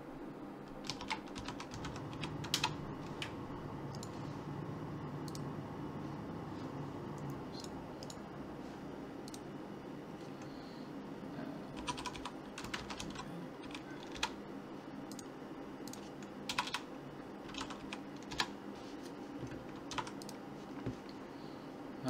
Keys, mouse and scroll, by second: 4.0-5.3 right drag, 5.3-7.1 drag, 5.7 right click, 8.1-10.0 right drag, 9.3-11.1 drag, 15.1 click, 16.7 BackSpace, 19.9 ctrl+s.